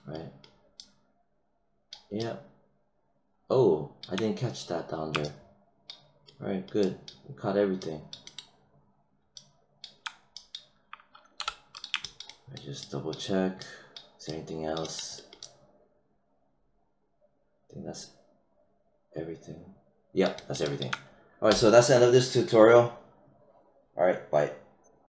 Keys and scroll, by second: 11.3 h.